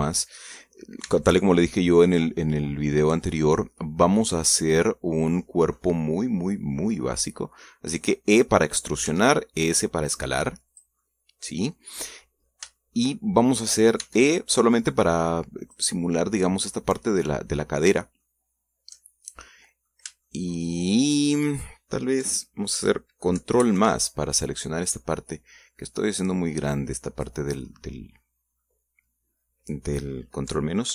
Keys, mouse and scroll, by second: 1.7 e, 9.0 click, 9.8 s, 11.4 click, 11.7-13.1 middle drag, 13.5 shift+middle click, 14.7 e, 16.4 click, 16.8 scroll down 2, 18.9 shift+middle click, 20.2 middle click, 21.0 shift+middle click, 24.3 ctrl+KP_Add, 25.6-28.1 drag, 28.4 middle click, 29.3 middle click, 30.1 scroll up 1.